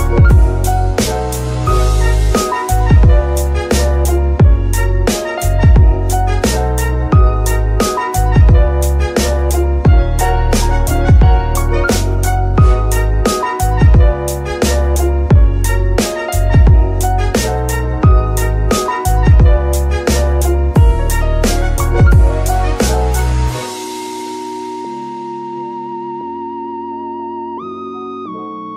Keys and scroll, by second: 1.9 KP_3, 6.8 KP_3, 12.0 z, 25.7 KP_3, 26.3 g, 26.8 shift+g.